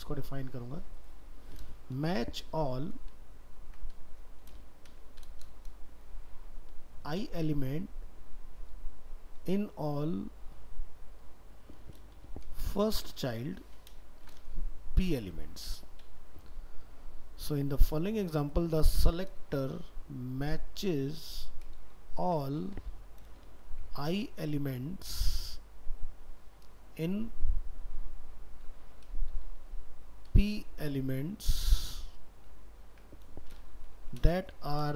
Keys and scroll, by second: 3.2 ctrl+shift+Left, 21.8 ctrl+shift+Right.